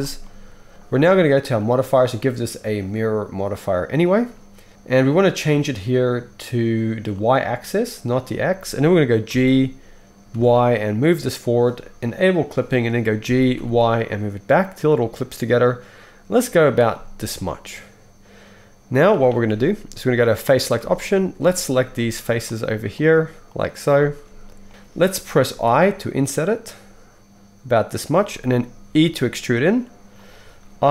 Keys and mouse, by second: 1.7-2.1 middle drag, 2.1-4.7 drag, 4.7-7.1 middle drag, 7.1 click, 9.3 g, 12.3 click, 13.2 g, 17.5-20.3 middle drag, 20.3 click, 20.8 alt+a, 21.1 shift+middle click, 21.5 shift+click, 21.6 shift+middle click, 22.4 shift+click, 22.5 shift+middle click, 23.0 shift+click, 23.0 shift+middle click, 23.4 shift+click, 23.6 shift+middle click, 23.9 shift+click, 24.0-30.9 shift+middle drag, 25.6 i, 29.0 e.